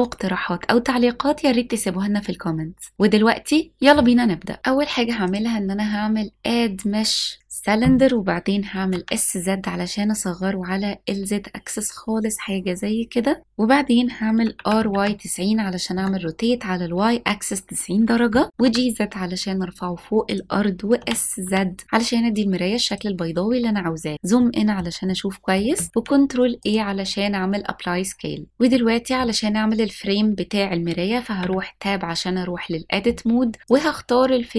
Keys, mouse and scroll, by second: 1.9-4.6 drag, 4.6 scroll up 1, 5.5-7.5 drag, 9.2 s, 9.4 z, 13.4 click, 14.8 r, 15.0 y, 15.3 KP_9, 15.4 KP_0, 16.5 KP_Enter, 18.5 g, 18.6 z, 20.4 click, 21.0 s, 21.4 z, 22.9 click, 23.5-24.4 scroll up 4, 24.5 shift+middle click, 25.1 middle click, 25.9 ctrl+a, 28.8 middle click, 31.4 Tab, 33.7-34.5 drag.